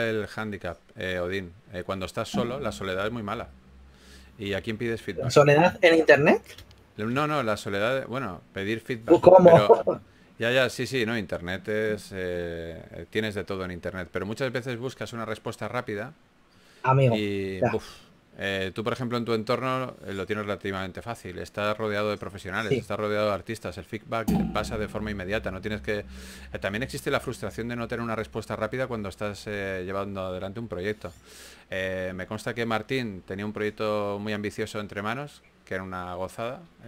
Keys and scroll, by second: 1.0 s, 5.5-6.3 typing, 7.5 s, 9.6 s, 10.3 s, 12.6 s, 14.9 4, 18.7-19.5 typing, 21.1-25.5 typing, 29.3-31.0 typing, 33.1 typing, 36.5 typing.